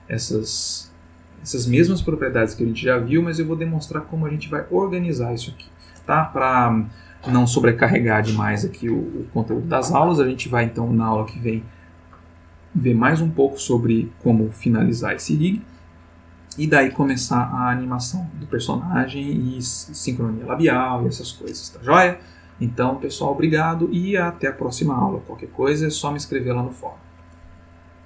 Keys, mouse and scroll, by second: 26.7 click.